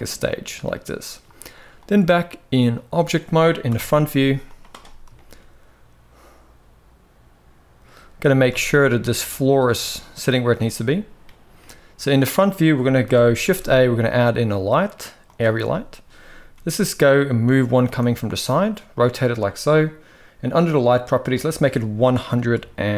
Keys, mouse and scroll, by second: 1.5-2.6 drag, 3.4 KP_1, 4.3 right click, 4.9 shift+middle click, 7.9 g, 11.3-12.1 middle drag, 12.8 KP_1, 13.2 shift+a, 16.3 g, 17.6 r, 20.3 click, 21.0-22.9 drag.